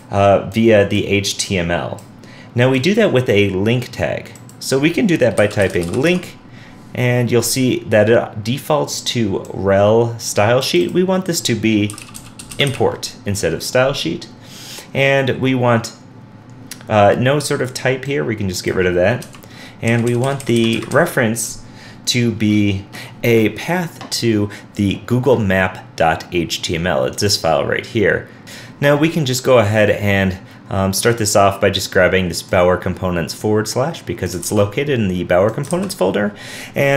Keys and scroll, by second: 28.4 super+w, 34.4 super+c, 35.7 super+v.